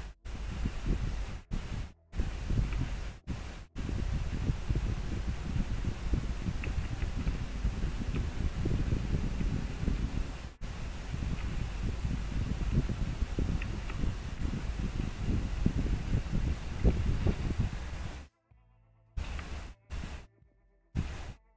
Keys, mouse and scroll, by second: 1.5 scroll up 1, 7.0 scroll down 1, 9.6 scroll down 1, 11.5 scroll up 1, 12.0 scroll down 1, 15.2 scroll up 1, 16.6 scroll down 1.